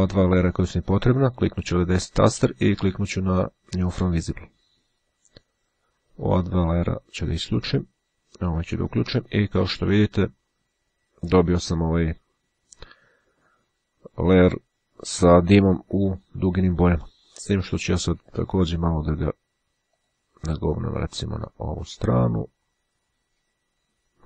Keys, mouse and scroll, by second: 1.4 right click, 4.3 click, 6.3 click, 7.1 click, 8.7 click, 20.1 click, 21.0 click.